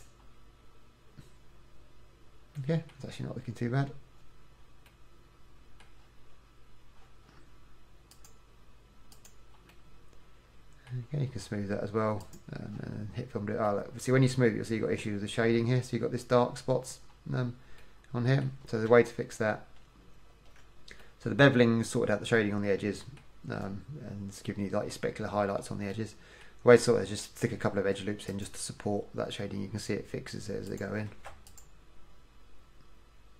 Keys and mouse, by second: 2.9 middle click, 5.1 middle click, 5.9 middle click, 9.9 middle click, 14.2 middle click, 19.1 Tab, 28.0 ctrl+r, 31.3 ctrl+r.